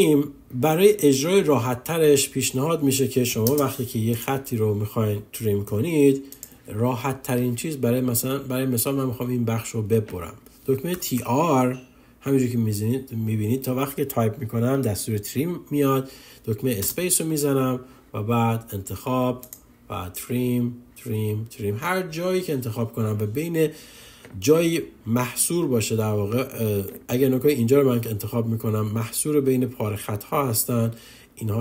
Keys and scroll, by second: 16.8 space.